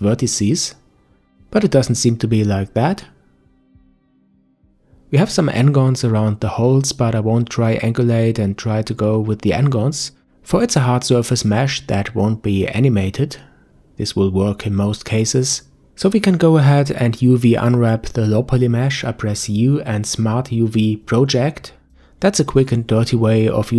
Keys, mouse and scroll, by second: 1.0 click, 2.1 click, 4.0 click, 7.3 click, 8.4-9.9 middle drag, 9.9 Tab, 10.1 scroll up 1, 10.3 Tab, 12.1-12.7 scroll down 1, 12.7-13.1 scroll down 1, 13.1-14.6 shift+middle drag, 16.5 u.